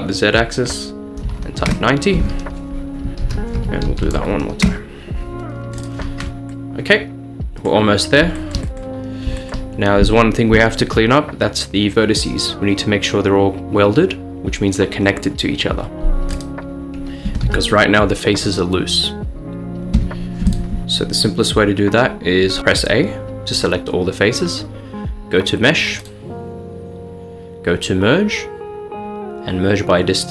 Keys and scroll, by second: 1.2 typing, 1.7 Return, 3.0-4.7 typing, 17.5 g, 20.0 Escape, 22.6 a.